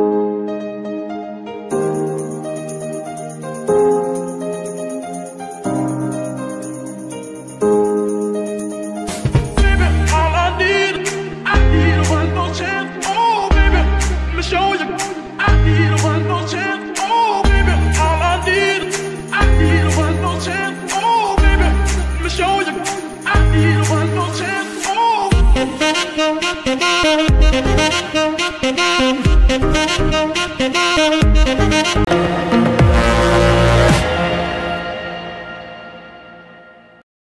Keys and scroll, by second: 2.5 Escape, 5.4 y, 8.1 Escape, 13.3 g, 13.3 y, 15.7 Escape, 19.6 shift+g, 20.2 Escape, 20.5 r, 21.6 Escape, 26.1 g, 27.4 Escape, 28.0 g, 28.4 Escape, 29.2 g, 29.6 Escape.